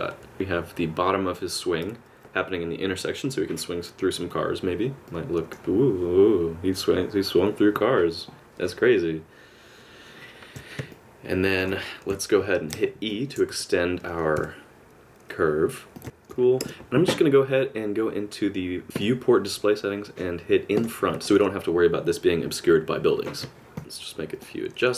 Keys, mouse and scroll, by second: 5.1 middle click, 10.9 middle click, 12.1 KP_7, 13.0 shift+scroll down 1, 13.1 shift+middle click, 13.5 e, 16.0 alt+g, 16.0 middle click, 16.6 Tab, 19.0 click, 20.8 click, 21.2 middle click, 23.8 Tab, 23.8 click, 23.8 g, 24.9 click.